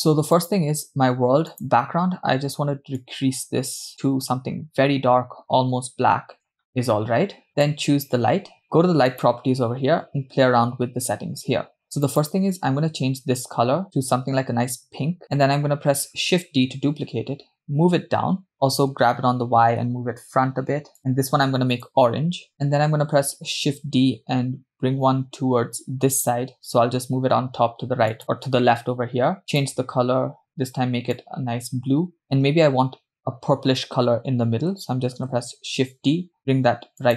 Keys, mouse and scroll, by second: 0.4 click, 1.5 click, 7.5 click, 9.1 click, 12.1 click, 16.4 shift+d, 19.2 g, 22.1 click, 23.3 shift+d, 29.8-31.1 drag, 35.4 shift+d.